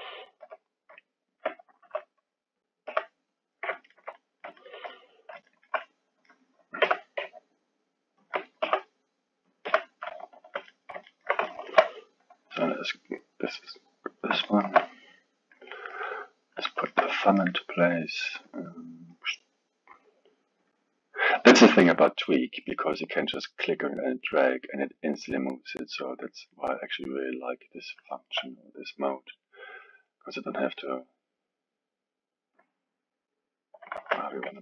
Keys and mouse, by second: 0.4 g, 1.8 r, 2.9 g, 3.7-6.8 ctrl+middle drag, 6.8 g, 8.6 r, 9.7 g, 10.7-12.6 middle drag, 13.0 click, 14.4-19.2 alt+middle drag, 19.2 click, 20.7 click, 24.0 click, 25.2-27.4 middle drag, 27.4 click, 28.1-29.6 alt+middle drag, 29.6 click, 30.6 click, 31.5-33.5 drag, 34.0 ctrl+z, 34.3-34.6 middle drag.